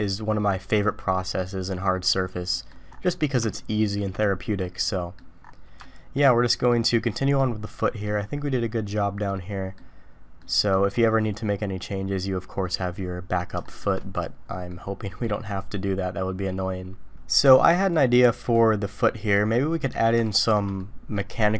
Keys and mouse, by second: 2.5 middle click, 3.6-4.0 shift+middle drag, 4.7-5.1 middle drag, 5.8-6.1 shift+middle drag, 6.7 middle click, 7.4-8.0 middle drag, 9.3 middle click, 10.4 middle click, 13.6 shift+middle drag, 14.7-15.2 middle drag, 16.5-19.3 middle drag, 20.2-20.5 shift+middle drag, 20.8-21.1 middle drag.